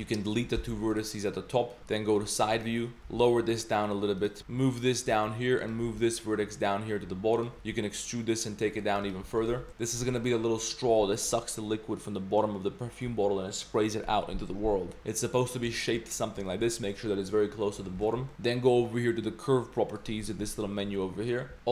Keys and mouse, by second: 0.6 x, 1.8 KP_1, 2.5 click, 3.0 g, 4.4 g, 5.6 click, 5.8 g, 7.5 e, 9.0 click, 9.2 g, 9.5 Tab, 9.7 Tab, 9.7 g, 10.0 Tab, 10.9 Tab, 15.0 Tab, 15.0 g, 15.7 shift+drag, 16.5 shift+drag, 16.9 Tab, 17.9 Tab, 18.0 shift+drag, 18.3 ctrl+s, 19.9 click.